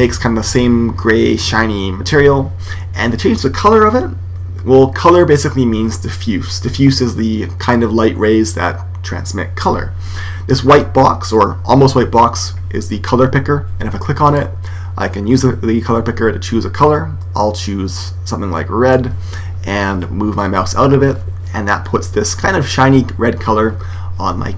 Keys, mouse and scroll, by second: 14.2 click.